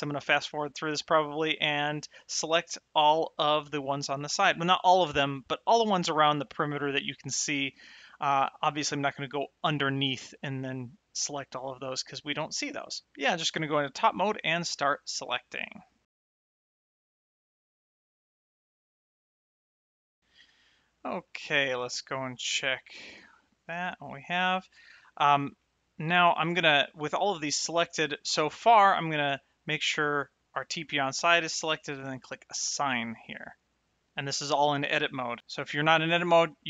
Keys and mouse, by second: 1.8 shift+middle click, 2.7 middle click, 15.2 shift+middle click, 16.9 l, 18.4 shift+middle click, 20.6 shift+middle click, 21.2 middle click, 22.3 shift+middle click, 23.3 shift+middle click, 25.6 shift+middle click, 32.5 click, 35.4 Tab.